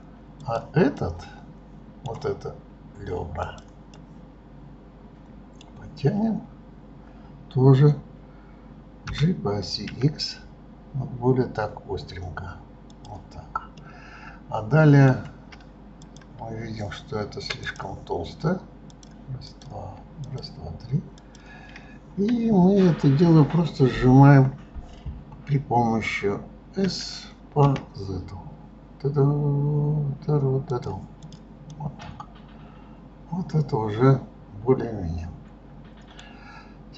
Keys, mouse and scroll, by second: 0.4 click, 1.0-3.4 middle drag, 3.4 click, 4.0-7.0 middle drag, 13.8-16.0 middle drag, 16.0 click, 17.7 click, 18.9 click, 19.5 click, 20.3 shift+click, 21.2 shift+click, 31.3 click, 31.7-34.8 middle drag.